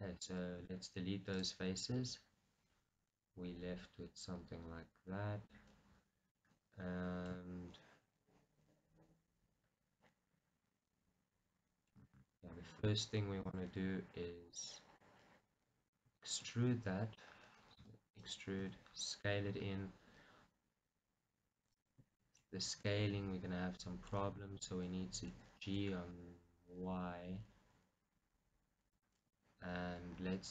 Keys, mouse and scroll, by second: 0.7 x, 1.9-4.1 middle drag, 4.4 middle click, 4.8-13.5 middle drag, 13.5-15.1 drag, 15.1-18.3 middle drag, 16.7-17.8 scroll up 2, 17.8 e, 18.3-21.1 right drag, 18.7 s, 21.9 click, 22.2-29.0 shift+right drag, 22.7 middle click, 25.3 g, 29.0 click, 29.4-30.5 scroll.